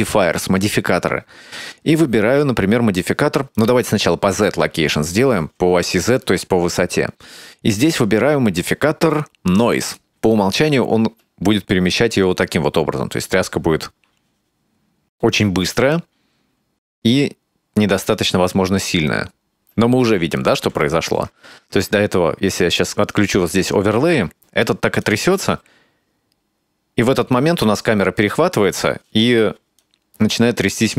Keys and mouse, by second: 3.6 click, 4.5 click, 7.9-10.0 drag, 11.1 space, 19.6 space, 20.9 middle click, 23.0 click, 25.0 click, 25.2 space, 29.1 space, 29.8-30.9 drag.